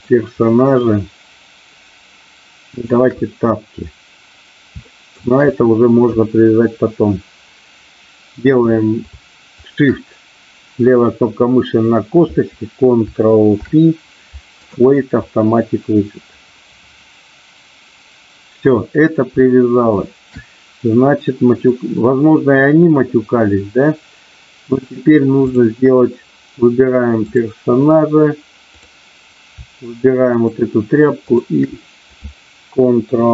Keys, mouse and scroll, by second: 0.4 shift+middle click, 4.7 shift+middle click, 9.6 shift+click, 13.5 ctrl+p, 19.5 shift+middle click, 21.1 middle click, 25.5 click, 27.1 click, 30.2 shift+click, 31.2 shift+click.